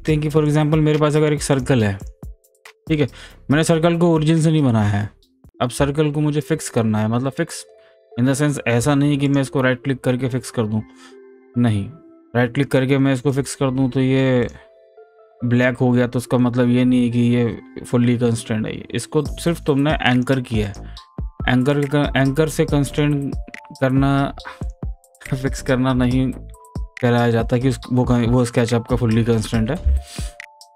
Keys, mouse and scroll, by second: 0.5 click, 9.3 right click, 13.3 click, 20.1 click, 20.2 click, 20.6 right click, 22.9 click.